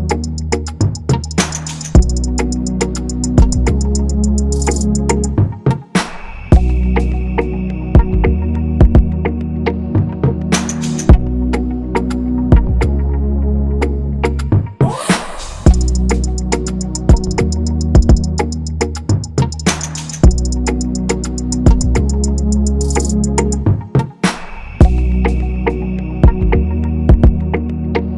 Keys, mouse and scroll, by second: 2.5 shift+Down, 3.4 shift+Up, 6.0 scroll, 10.3 double click, 14.6 double click, 18.3 right click, 19.6 ctrl+=, 20.0-20.4 scroll, 26.3 ctrl+-, 26.4 ctrl+-, 26.6 ctrl+-, 26.7 ctrl+-.